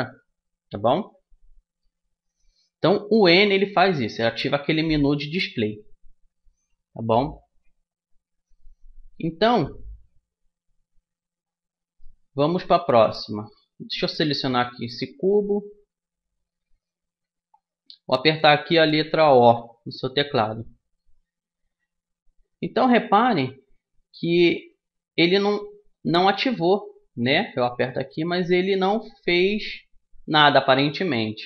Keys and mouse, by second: 3.2 n, 11.9 middle click, 14.3-16.2 drag, 19.4 o, 20.5 click, 24.2-26.3 middle drag, 26.3 o, 27.9 o, 28.3 o, 29.3 o, 30.2 o.